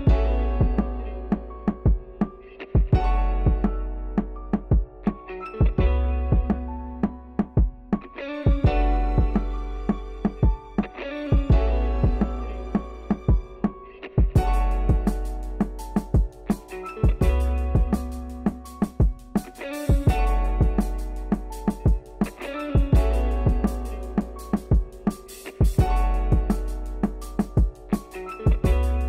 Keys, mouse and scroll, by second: 0.2 middle click, 0.9 e, 2.8-3.9 middle drag, 3.9 Tab, 4.0 middle click, 4.6 Tab, 4.7 middle click, 4.9 click, 5.2 x, 5.5-7.4 middle drag, 7.4 Tab, 7.5-8.8 middle drag, 8.8 KP_3, 9.2-10.7 shift+middle drag, 10.7 Tab, 10.9 middle click, 11.2 a, 12.5 u, 13.9-14.9 drag, 14.9 Tab, 15.7-16.9 drag, 17.1 shift+middle click, 17.3 scroll up 4, 17.5 scroll down 3, 17.8-18.1 scroll up 2, 18.1-24.8 shift+middle drag, 24.8-25.8 drag, 25.8 n, 26.2 click, 26.5 shift+middle click, 26.8 click, 26.9 scroll up 7, 27.1 shift+a, 28.8-29.0 drag.